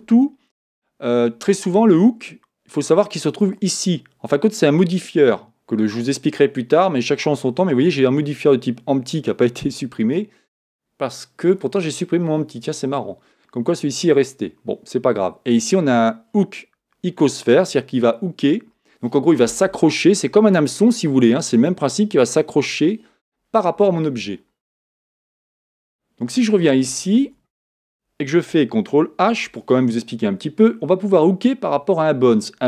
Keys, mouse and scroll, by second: 3.3-6.3 drag, 25.7 Tab, 27.2 Tab, 27.2 Tab, 29.3 ctrl+h.